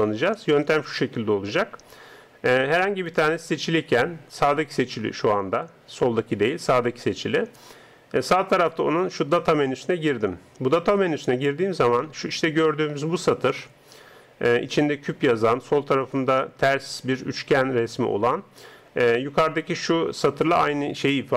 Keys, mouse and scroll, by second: 3.0-4.5 right drag, 9.6-21.3 drag.